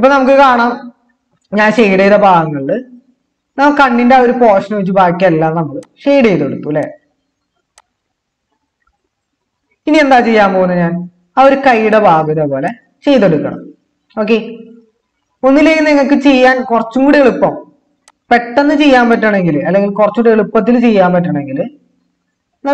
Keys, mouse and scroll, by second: 4.7-5.4 typing.